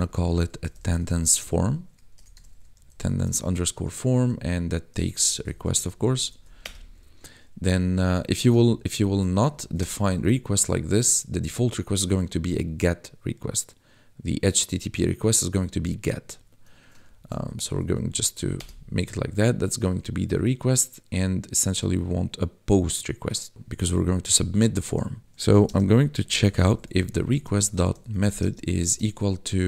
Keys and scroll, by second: 0.0-0.9 typing, 2.1-3.9 typing, 4.9-6.3 typing, 6.0 Right, 6.6 Return, 8.5 ctrl+Left, 9.5 ctrl+shift+Left, 9.8 BackSpace, 17.0 ctrl+z, 17.4 Right, 18.5 Return, 25.2 ctrl+s, 25.4-28.8 typing.